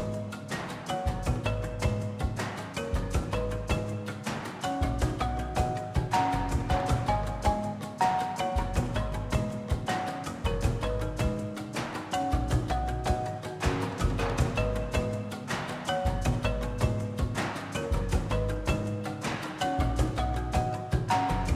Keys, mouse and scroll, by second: 1.7 s, 2.1 scroll up 4, 2.3 middle click, 2.7 scroll up 1, 2.7 shift+a, 3.9 g, 4.4 middle click, 4.5 s, 5.3-6.5 drag, 6.5 KP_0, 6.6 KP_0, 7.3 scroll down 3, 7.4 middle click, 7.6 g, 8.2 r, 8.8 ctrl+z, 10.1 KP_Divide, 10.6 KP_0, 10.9-11.9 scroll up 1, 12.4 click, 12.5 Tab, 12.6 scroll down 2, 12.9 2, 13.1 click, 13.4 e, 14.4 click, 14.8 ctrl+b, 15.9 Tab, 16.3-18.0 right drag, 18.0 KP_1, 18.1-19.1 scroll up 3, 19.1 click, 19.5 scroll down 1, 19.6 middle click, 19.7 scroll up 1, 20.0-20.8 middle drag, 20.4-20.8 drag, 21.1 shift+click, 21.3 shift+click.